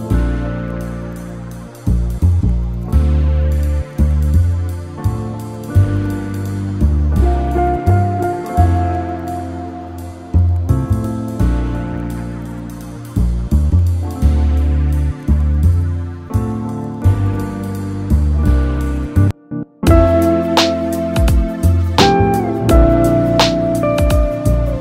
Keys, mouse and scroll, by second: 3.0-3.8 scroll up 3, 3.8-6.9 middle drag, 6.9-9.9 drag, 9.9 scroll down 2, 10.3 click, 10.7-11.9 middle drag, 11.9-12.5 scroll up 2, 12.5-15.4 middle drag, 15.4-16.2 scroll down 2, 16.2-17.7 middle drag, 17.7 scroll down 4, 18.3-24.8 shift+middle drag.